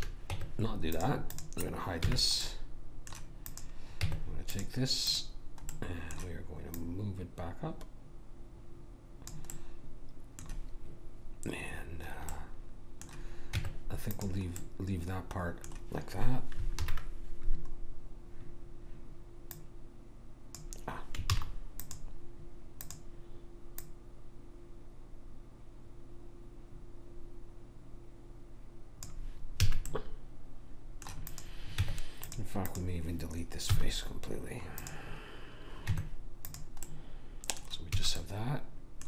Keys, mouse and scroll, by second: 0.3 Tab, 1.3-2.5 drag, 2.0 h, 4.0 Tab, 5.6-8.6 drag, 5.7-7.4 right drag, 9.5-13.5 middle drag, 13.5 Tab, 14.6-16.7 middle drag, 16.9 alt+h, 19.5 click, 21.4 ctrl+z, 21.8-25.7 drag, 29.6 a, 30.0 middle click, 31.3-34.6 drag, 31.8 Tab, 33.7 x, 35.9 Tab, 38.0 a.